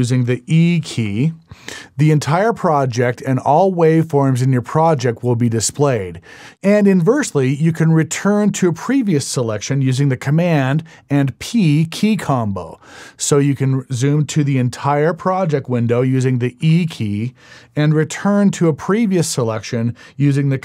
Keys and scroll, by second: 0.9 e, 11.7 super+p.